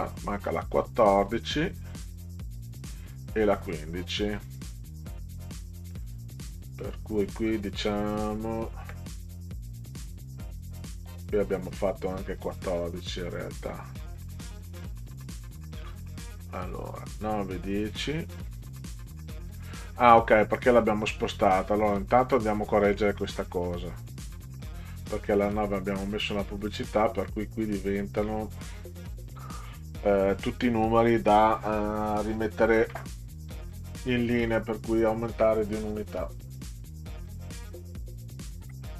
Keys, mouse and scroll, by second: 0.4 click, 3.6 scroll up 2, 4.2 click, 6.4 drag, 7.0-7.6 scroll down 4, 15.8 scroll down 2, 16.7 scroll up 2, 17.8 click, 22.4 scroll up 2, 23.6 click, 26.8 click, 27.0 click, 36.8 click, 38.8 0.